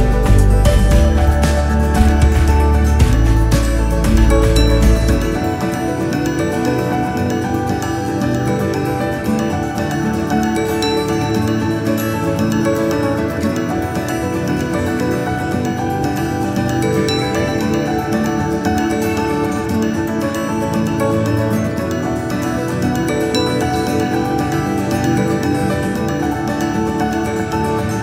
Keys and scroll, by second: 27.9 Delete.